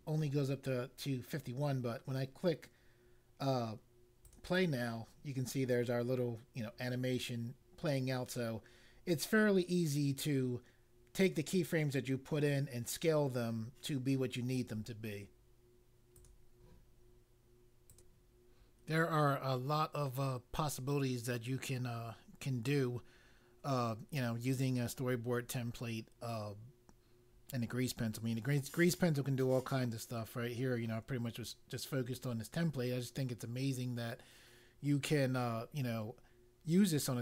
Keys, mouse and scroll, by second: 4.2 click, 16.1 click, 17.9 click.